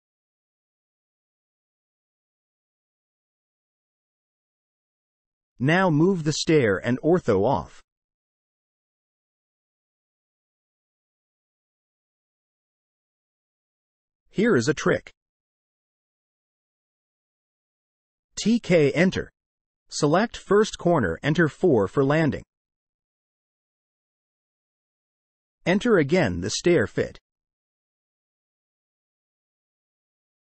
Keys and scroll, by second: 0.3 m, 0.5 space, 1.2 space, 2.4 Delete, 3.5 m, 3.5 space, 6.2 F8, 18.4-19.4 typing, 23.0 4, 23.9 Return, 27.7 Return.